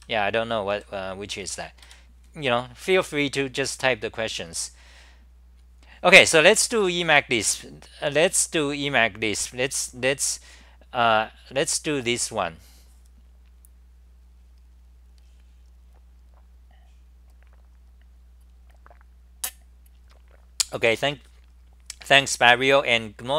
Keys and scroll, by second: 1.2-2.4 typing, 6.8 d.